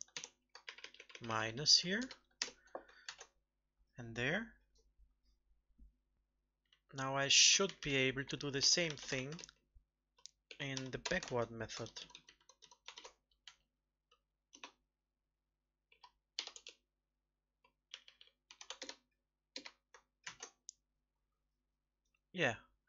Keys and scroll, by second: 0.6 ctrl+Right, 0.8 ctrl+Right, 1.0 ctrl+Right, 1.2 ctrl+Right, 1.4 ctrl+Right, 3.0 ctrl+s, 9.1 ctrl+c, 11.2 ctrl+v, 11.8 ctrl+Left, 11.9 ctrl+Left, 12.1 ctrl+Left, 12.2 ctrl+Left, 12.3 ctrl+Left, 12.5 ctrl+Left, 20.2 ctrl+s.